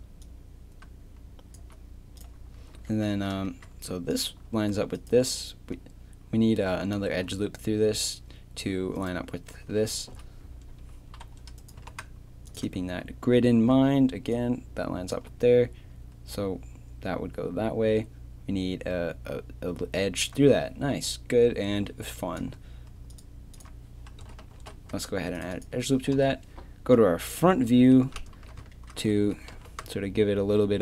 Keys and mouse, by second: 2.0 right click, 2.6 z, 2.7 a, 3.1 z, 6.7 right click, 7.2 a, 9.0-10.1 right drag, 10.1 KP_3, 11.8 g, 12.7 click, 12.8 a, 13.7-14.4 d, 14.4-15.0 drag, 23.5-24.5 drag, 24.5 ctrl+r, 26.1 KP_1, 27.5 z, 28.3 z, 29.2 z, 29.5 g.